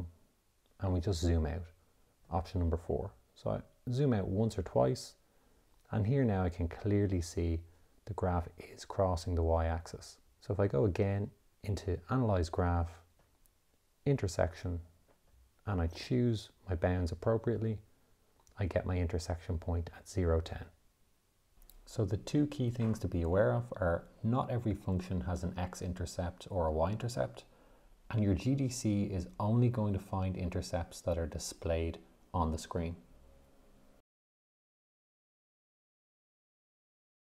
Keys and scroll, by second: 0.2 4, 11.3 Menu, 12.9 6, 14.5 4.